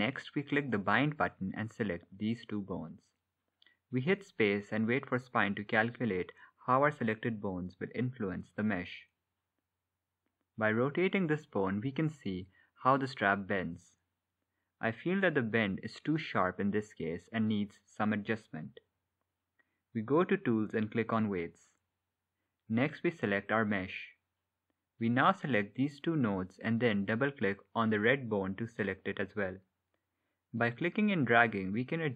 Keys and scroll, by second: 3.7 space.